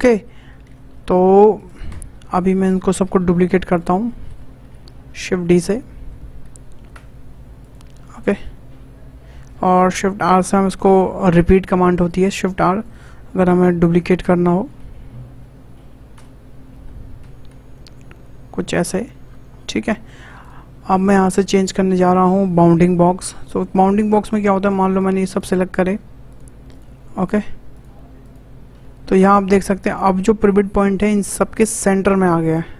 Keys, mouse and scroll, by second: 0.0-0.5 shift+middle drag, 0.5-1.1 scroll down 1, 2.2-2.8 scroll down 3, 3.3 Delete, 3.7 click, 4.0 shift+middle click, 4.6 shift+d, 8.1-9.5 shift+middle drag, 9.5 shift+r, 9.8 shift+r, 10.4-11.0 scroll down 2, 11.0-12.1 shift+middle drag, 12.1 click, 14.7 shift+d, 18.9 scroll down 4, 19.2-19.9 shift+scroll up 6, 19.9-20.4 shift+middle drag, 20.4 shift+click, 21.0-24.0 drag, 24.6 click, 24.9 shift+click, 25.3 shift+click, 25.8 shift+click, 26.3 shift+click, 26.7 shift+click, 27.1 shift+click, 27.7 shift+click, 28.2 shift+click.